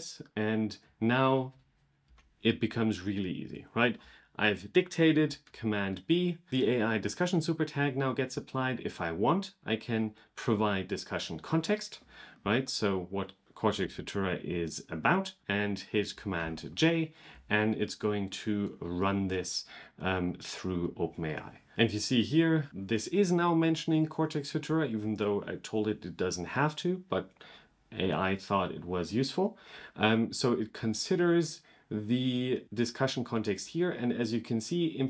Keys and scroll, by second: 5.3 super+b, 12.2 super+c, 13.7 super+v, 15.4 super+k, 16.2 super+j.